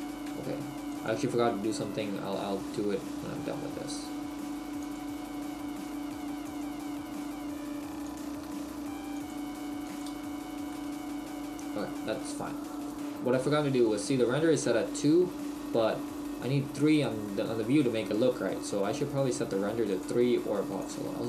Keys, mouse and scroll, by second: 0.3 ctrl+r, 4.9 click, 6.2 ctrl+r, 8.2 click, 8.6 ctrl+r, 10.1 Tab, 10.1 click, 10.7 middle click.